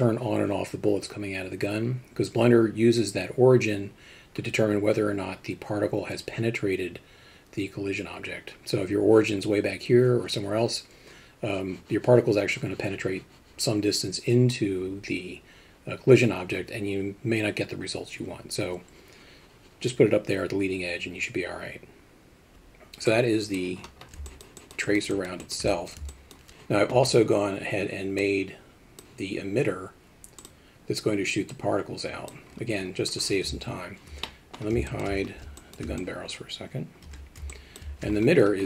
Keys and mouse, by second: 24.3 alt+shift+middle drag, 24.6 alt+shift+middle drag, 24.8 shift+middle drag, 25.1 alt+shift+middle click, 25.4 alt+shift+middle drag, 25.7 alt+middle drag, 26.1 alt+shift+middle drag, 28.2-29.0 drag, 30.4 click, 31.5-33.5 drag, 34.2 middle drag, 34.9 alt+shift+middle drag, 35.6 alt+shift+middle drag, 36.0-36.3 drag, 37.1 h, 37.5 alt+middle drag.